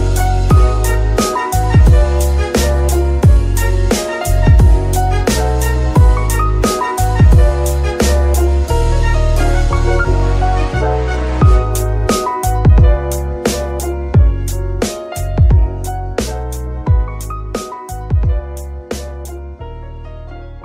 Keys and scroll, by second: 0.0 z, 0.7 y, 4.2 Escape, 5.6 g, 5.8 y, 7.3 Escape.